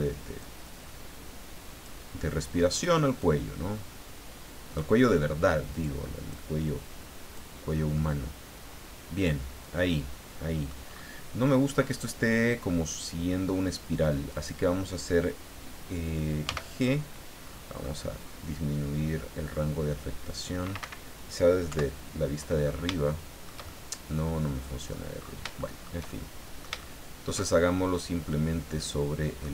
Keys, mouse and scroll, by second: 0.4-2.0 drag, 2.7 right click, 3.2-4.9 drag, 5.7 right click, 6.3 click, 7.6 scroll down 1, 7.9-10.9 middle drag, 10.9-11.6 scroll up 2, 14.3 right click, 16.4 g, 17.2 middle click, 17.4-18.4 scroll up 6, 17.7 middle click, 18.1 middle click, 18.4 middle click, 20.8 Escape, 21.7 KP_7, 22.6-23.1 scroll down 3, 23.1-25.1 shift+middle drag, 25.2-25.5 scroll up 3, 25.6 shift+middle click, 26.5 shift+middle click, 28.3-29.5 middle drag.